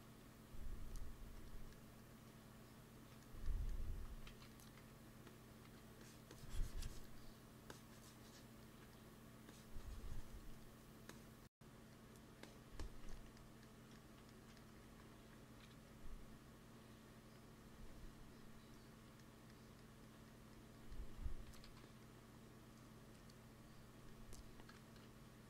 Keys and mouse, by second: 0.2-2.1 drag, 2.7 click, 4.2 shift+c, 4.6 f, 5.5 f, 5.9-7.2 drag, 8.5-14.5 drag, 14.7 ctrl+s, 16.0 KP_1, 19.5-20.8 middle drag, 21.3 g, 21.5 f, 22.2-23.9 drag, 25.3-25.4 drag.